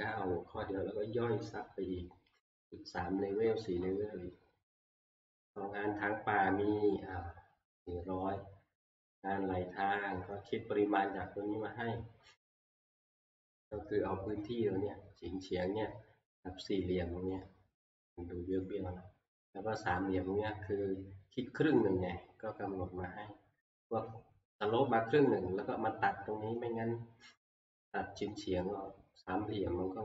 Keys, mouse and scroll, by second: 11.3-12.1 scroll, 12.9-13.4 scroll, 13.8-17.0 scroll, 18.5 scroll, 22.3 middle click, 22.4 scroll.